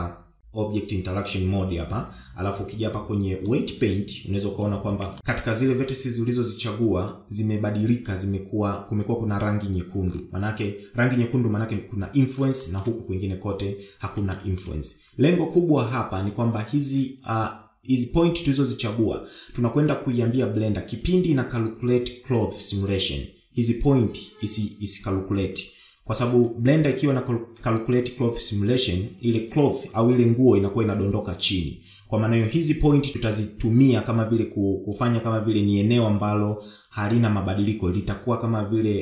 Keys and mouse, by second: 13.1 shift+middle click, 14.9 shift+middle click.